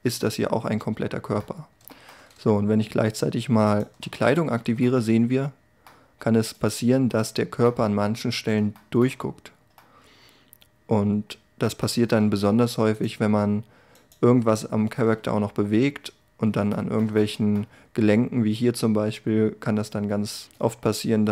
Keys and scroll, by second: 4.1 a.